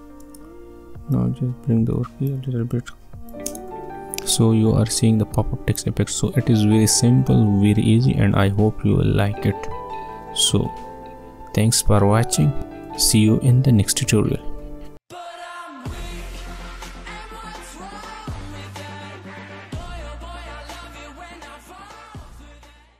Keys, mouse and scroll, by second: 1.1-3.5 drag, 3.5 space, 14.8 space.